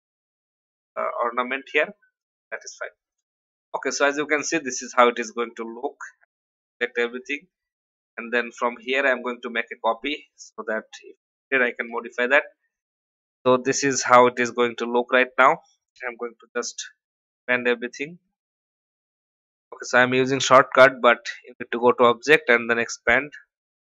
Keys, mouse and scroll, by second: 4.2-4.6 alt+scroll down 1, 4.9-6.6 drag, 7.1 alt+scroll down 1, 8.5 alt+click, 10.6 click, 11.8 ctrl+g, 12.6 click, 14.8 alt+scroll up 1, 16.3 ctrl+2, 16.7 ctrl+3, 17.8 click, 18.9 ctrl+2, 19.2 ctrl+3, 20.3 click.